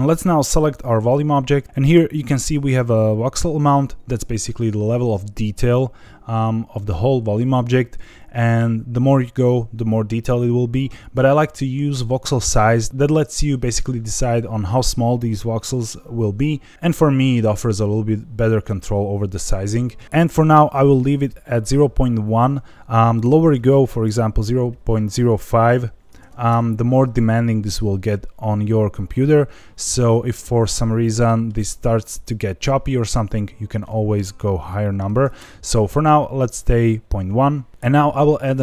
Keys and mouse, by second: 11.1-12.2 drag, 23.4-27.0 drag, 29.9-31.4 middle drag, 33.7-35.8 drag.